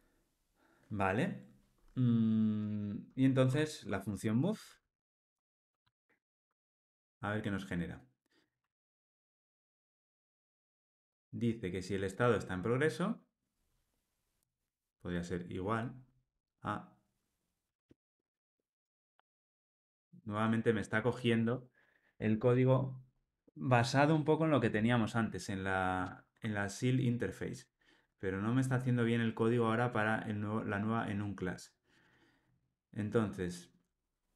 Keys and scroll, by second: 6.4 Tab.